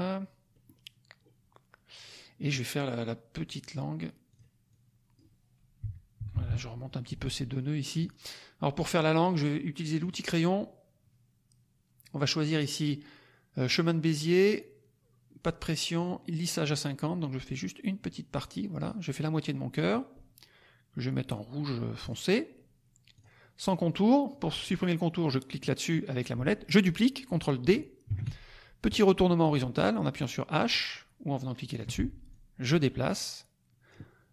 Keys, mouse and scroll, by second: 0.5 middle click, 0.5-0.8 scroll up 2, 4.3 click, 4.6 click, 5.8 Up, 7.9 click, 9.9 click, 17.5-19.0 drag, 22.1 click, 23.1 click, 25.4 click, 28.1 ctrl+d, 31.5 click, 32.2-34.0 drag.